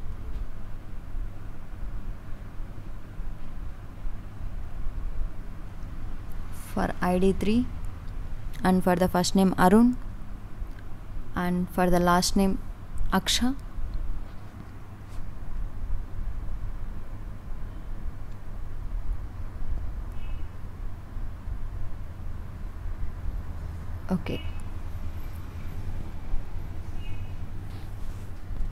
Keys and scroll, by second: 12.0 Right, 17.0 Right.